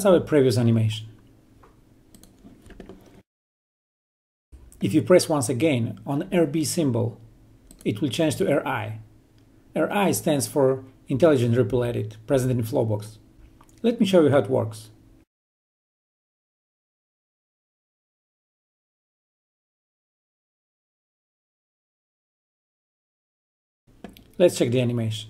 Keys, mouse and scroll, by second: 0.7 click, 8.4 click, 16.0 ctrl+Num_Lock, 16.3 ctrl+click, 16.8-17.4 click, 17.8-18.8 ctrl+click, 19.1-20.1 ctrl+drag.